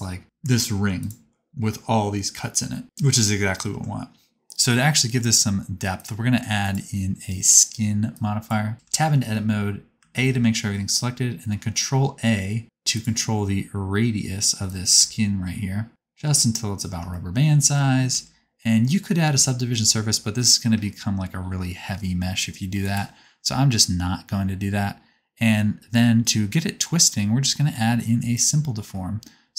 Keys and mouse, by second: 3.8 Tab, 6.0 click, 6.6-9.4 drag, 8.7 Tab, 9.1 a, 10.1 ctrl+a, 13.1-14.7 middle drag, 18.2 Tab, 20.4-29.5 drag.